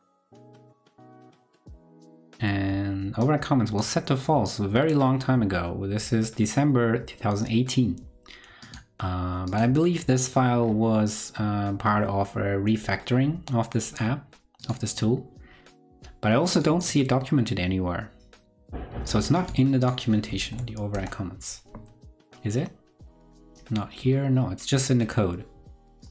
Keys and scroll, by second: 20.4 super+v.